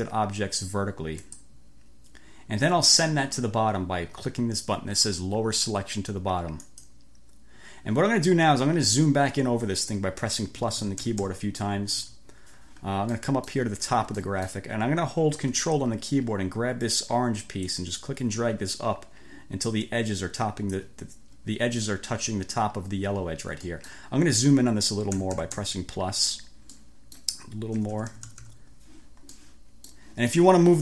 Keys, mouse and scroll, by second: 1.3 click, 6.7 click, 10.7 =, 12.0 =, 13.2-13.7 scroll up 2, 13.7 click, 14.3-14.7 scroll up 2, 14.7 click, 17.7-21.0 ctrl+drag, 23.7 click, 24.0 middle click, 25.1 =, 26.8-27.4 scroll up 2, 27.9 =, 29.4 middle click, 29.9 click, 30.4-30.8 drag.